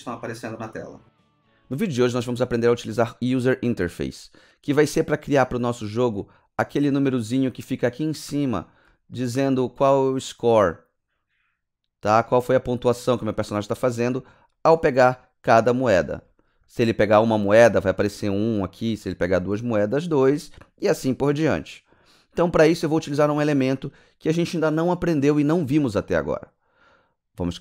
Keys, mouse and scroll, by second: 6.7 scroll up 1, 7.9 alt+click, 8.3 alt+middle click, 8.8 alt+click, 9.2 alt+middle click, 9.3 alt+scroll up 2, 9.6 click, 13.6 alt+click, 14.0 alt+middle click, 14.4 alt+click, 16.2 alt+click, 16.6 alt+middle click.